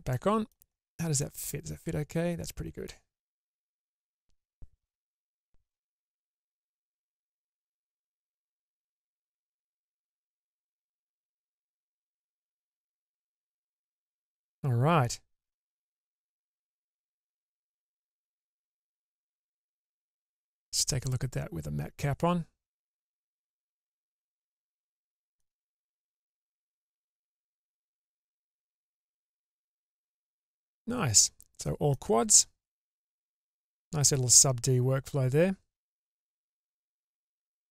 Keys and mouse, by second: 0.3 middle click, 1.4-3.0 middle drag, 4.0-6.4 middle drag, 7.2 Tab, 8.2 Tab, 9.1 Tab, 9.7 Tab, 11.9 Tab, 12.7-15.7 middle drag, 19.7 click, 21.2-23.9 drag, 24.3-25.5 middle drag, 26.6-28.3 drag, 28.7-29.6 middle drag, 30.4-32.1 middle drag, 33.0-37.7 middle drag.